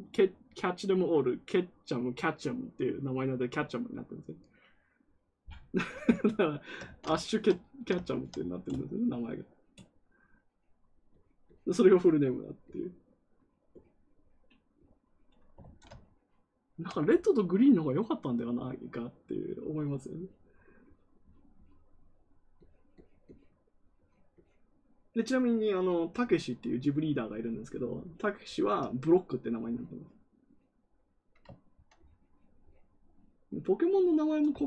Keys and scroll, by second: 6.8 ctrl+z, 15.5 ctrl+z.